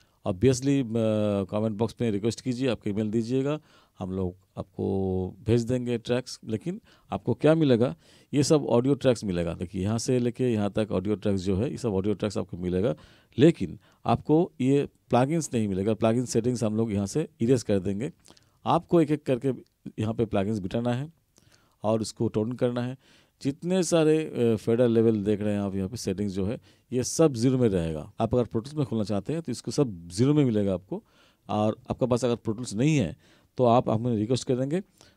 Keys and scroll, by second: 0.1 ctrl+=, 14.3 ctrl+=.